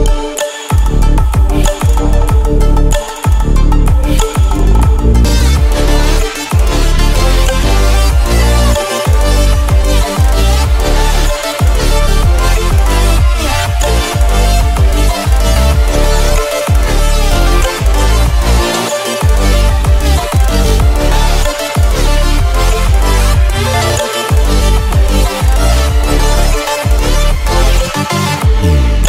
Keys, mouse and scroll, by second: 0.6 alt+scroll down 1, 1.2 alt+scroll up 1, 2.4-4.1 drag, 4.1 ctrl+scroll up 1, 5.2 scroll up 2, 8.6-9.7 drag, 9.7-10.1 scroll down 2, 10.6 scroll down 1, 12.7 v, 13.3-20.8 drag, 24.4 click, 26.1-26.6 alt+scroll down 2, 27.2-27.6 ctrl+scroll down 1, 28.9 scroll up 1.